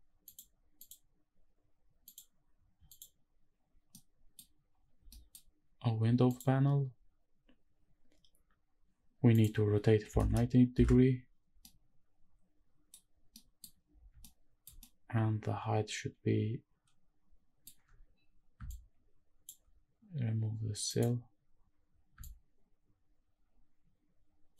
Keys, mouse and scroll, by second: 0.2 click, 0.8 click, 2.1 click, 2.9 click, 3.9-4.4 middle drag, 5.1 middle drag, 5.5 scroll up 1, 6.3 click, 9.3-10.7 drag, 11.6-12.9 middle drag, 13.3 middle drag, 13.9 scroll up 1, 14.2-14.6 shift+middle drag, 14.7 scroll up 1, 14.8-17.7 middle drag, 18.7 shift+click, 20.9 click, 22.2-24.5 shift+drag.